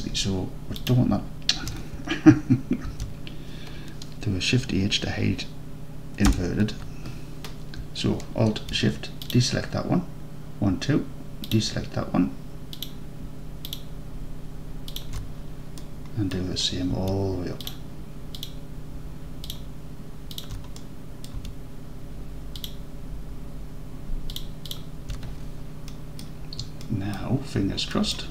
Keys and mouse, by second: 0.8 alt+shift+click, 2.9 ctrl+z, 6.3 shift+h, 9.3 alt+shift+click, 11.5 alt+shift+click, 14.9 alt+shift+click, 15.9 middle drag, 16.1 middle drag, 16.3 middle click, 17.7-20.6 alt+shift+drag, 20.8-21.3 middle drag, 22.6 alt+shift+click, 24.3 alt+shift+click, 24.7 alt+shift+click, 25.9-26.3 drag, 26.9-27.2 alt+drag, 28.0 click.